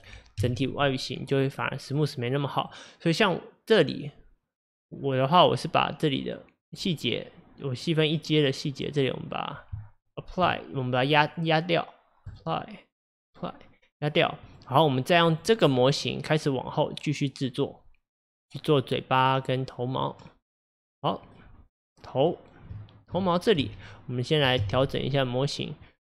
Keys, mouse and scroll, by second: 0.5 KP_1, 2.0-5.0 middle drag, 6.6 click, 7.1 click, 8.9-9.8 drag, 9.8 Tab, 11.3-14.6 drag, 15.4 click, 18.2-21.2 middle drag, 21.4-23.7 middle drag, 23.7 KP_1, 24.7 KP_7.